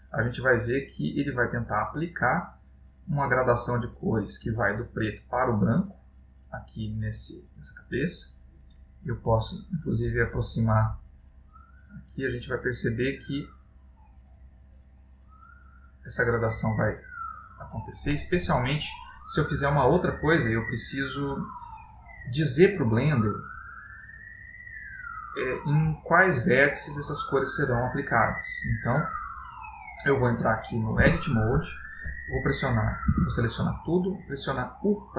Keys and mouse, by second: 4.5 middle click, 9.0 click, 11.2 click, 15.1 middle click, 25.5 middle click, 28.6 middle click, 31.2 Tab, 33.3 a.